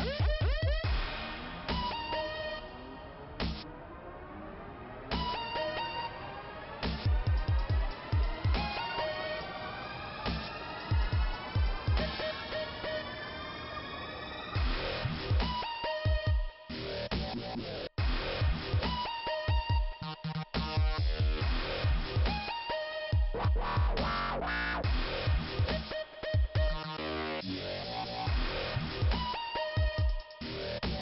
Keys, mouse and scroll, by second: 2.2 scroll up 2, 4.5 click, 5.8 click, 6.0 click, 6.8 click, 15.0 click, 20.1 click, 20.3 click, 20.4 double click, 20.5 double click, 22.3 click, 23.1 click, 23.3 click, 23.8 scroll down 2, 26.7 scroll up 2, 28.6 click, 30.2 click.